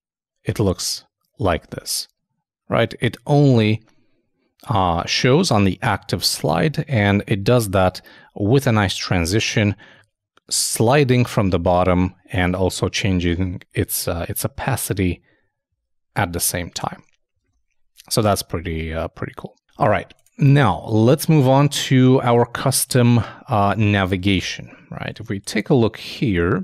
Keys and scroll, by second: 17.4 super+Tab, 21.5 super+Tab, 24.3 shift+0.